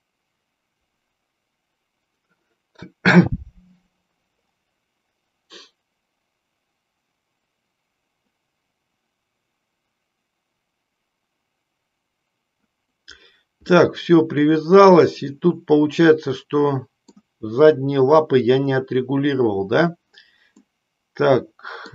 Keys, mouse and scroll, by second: 13.8-17.2 middle drag, 20.6-21.9 middle drag.